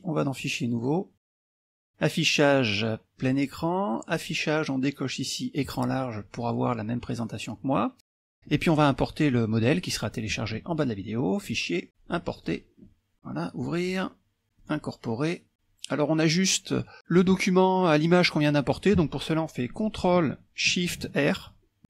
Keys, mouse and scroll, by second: 0.4 click, 1.4 click, 3.2 click, 4.2 click, 5.8 click, 11.4 click, 12.4 click, 13.1 click, 13.6 click, 14.6 click, 21.6 ctrl+shift+r.